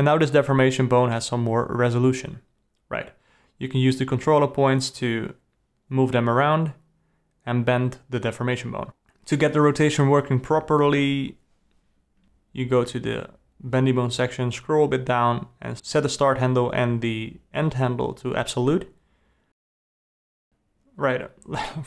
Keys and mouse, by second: 3.8 r, 6.5 r, 7.4 g, 9.7 alt+a, 10.1 click, 12.5 click, 14.9-16.1 drag, 17.0-19.9 drag, 20.3 click, 20.8 alt+a.